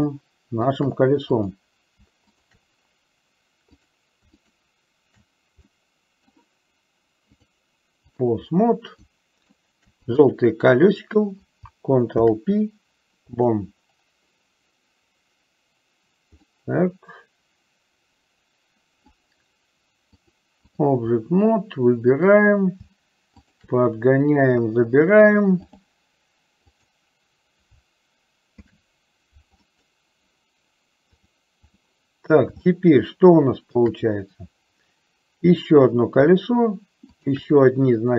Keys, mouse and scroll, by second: 0.3 shift+middle click, 1.5 click, 3.9 click, 4.5 shift+click, 5.9 middle click, 7.4-8.4 drag, 9.3 shift+middle click, 10.3 click, 12.2 ctrl+p, 16.6-19.4 middle drag, 20.4 click, 22.2 click, 25.2 click, 26.8 click, 28.6 ctrl+p, 31.2 click, 32.9-34.1 shift+middle drag, 35.6 click, 37.3 shift+click.